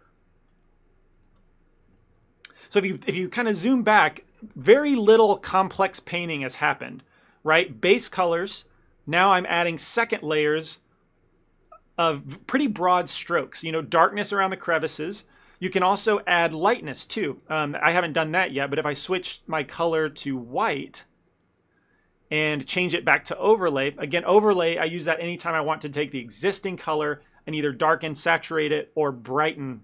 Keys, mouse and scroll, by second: 0.6 click, 2.1 ctrl+middle click, 2.3 middle click, 17.5 ctrl+middle click, 19.3 middle click, 20.6 click, 22.8 click.